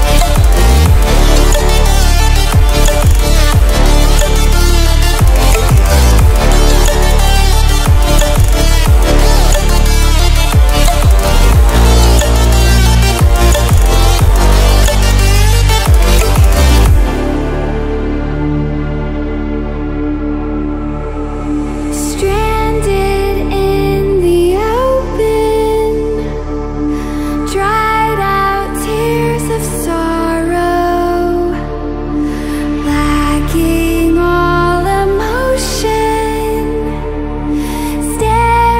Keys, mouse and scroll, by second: 2.7-3.5 scroll up 1, 3.5 click, 7.4-8.7 drag, 14.7 click, 18.7-19.5 typing, 19.0 click, 21.2-21.9 typing, 21.4 click, 24.4 click, 31.3 typing, 32.3-33.4 drag, 33.2 typing, 37.7 click.